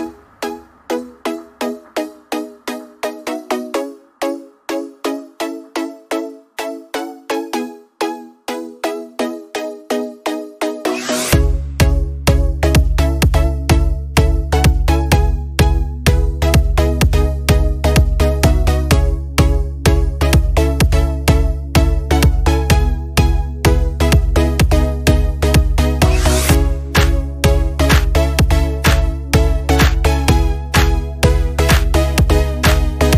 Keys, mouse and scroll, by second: 6.5 alt+scroll down 1, 9.8 click, 14.1 ctrl+[, 17.9 right click, 21.0 click, 23.9 scroll down 1, 24.3 scroll up 1, 24.6-25.4 typing, 26.9 click.